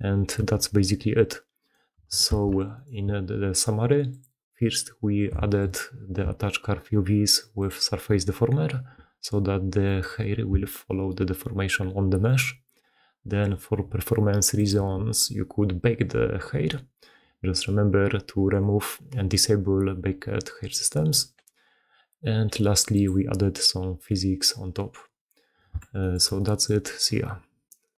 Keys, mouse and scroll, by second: 0.4 g, 1.2 middle click, 2.2 shift+space, 5.3 shift+middle click, 10.4 g, 25.5-26.0 shift+middle drag, 26.1-26.6 shift+middle drag.